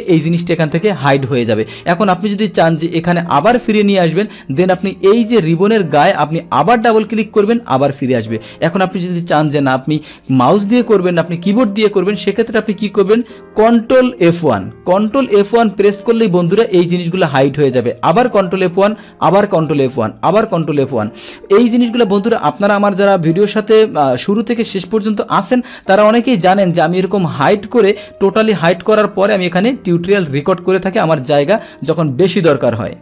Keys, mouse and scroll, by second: 5.4 click, 6.5 click, 12.7 click, 14.2 ctrl+F1, 18.2 ctrl+F1, 20.3 ctrl+F1, 28.7 click.